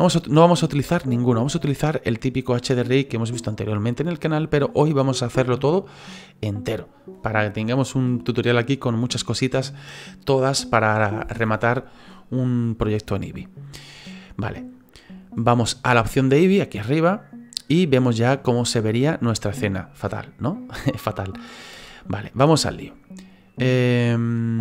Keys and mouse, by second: 17.1 click.